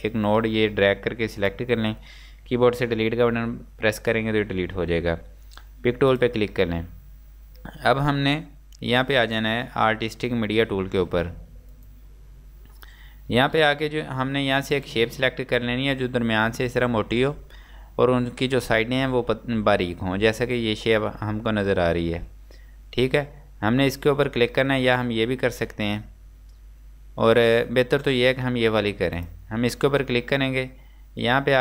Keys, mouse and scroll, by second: 6.1 Delete, 6.2 click.